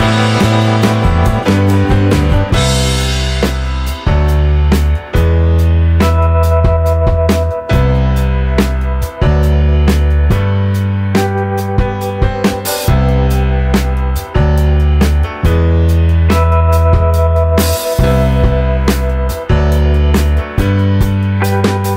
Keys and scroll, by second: 6.1 Delete.